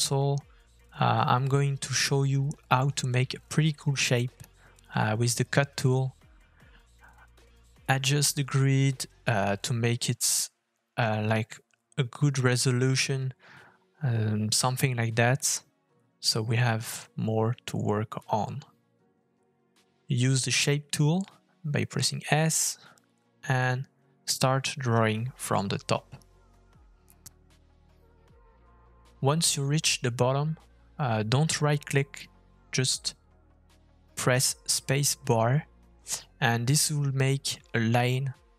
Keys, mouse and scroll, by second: 0.4 shift+middle click, 1.9 click, 3.7 f, 7.2 shift+middle click, 8.1 KP_3, 8.6 KP_1, 9.6 shift+middle click, 37.3 middle click.